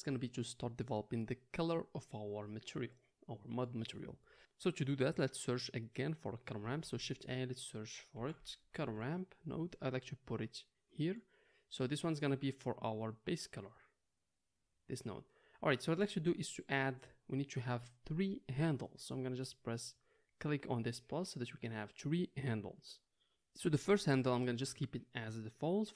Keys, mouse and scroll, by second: 4.4-12.0 middle drag, 6.8 shift+a, 12.0-13.7 drag, 13.7-15.1 middle drag, 15.1-25.9 drag.